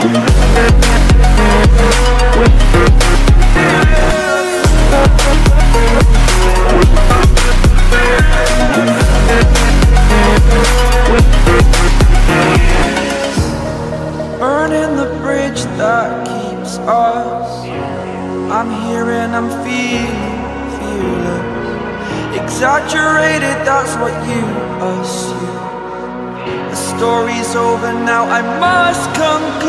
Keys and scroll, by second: 8.6 ctrl+i, 20.7 ctrl+j, 21.5 ctrl+t.